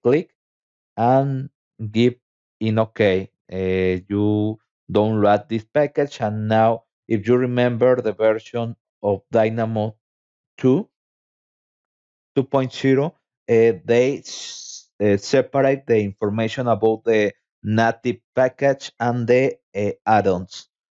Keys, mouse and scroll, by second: 0.3 click, 1.8 click, 7.6 click, 15.0 click, 16.2-17.3 scroll down 6, 18.9 click.